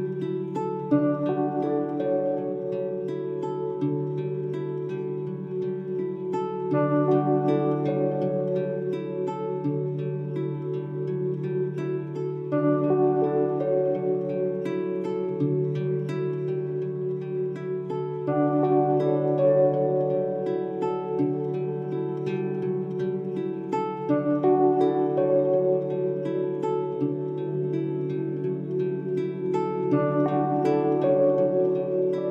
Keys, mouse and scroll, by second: 20.1-21.7 drag, 22.0 right click, 23.1-24.3 drag, 30.7-32.3 drag.